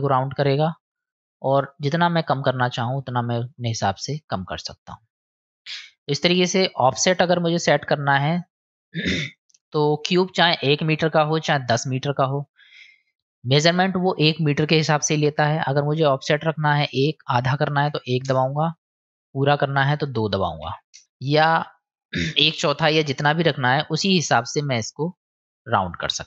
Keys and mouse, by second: 0.7-5.3 drag, 6.0-7.1 drag, 8.1-9.4 drag, 11.5-12.8 middle drag, 13.7-15.3 drag, 16.0-19.0 drag, 19.5-21.0 drag, 22.3 click.